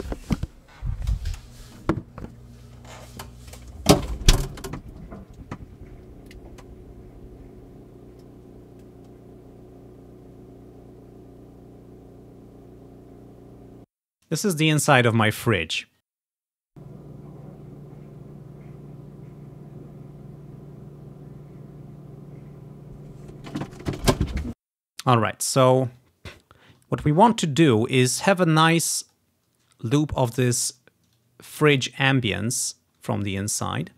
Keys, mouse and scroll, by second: 2.0 ctrl+scroll up 1, 12.5 ctrl+scroll down 3, 13.3-14.7 scroll down 3, 14.0 space, 16.3-17.9 drag, 16.8 space, 17.4-18.5 scroll up 1, 24.6 space, 25.9 ctrl+click, 26.2-28.3 ctrl+scroll down 2, 28.8 click, 30.1 ctrl+scroll up 1, 30.5 click, 30.9-33.5 drag, 32.1-32.5 ctrl+scroll up 1, 32.8 ctrl+scroll up 1, 33.6 scroll up 1.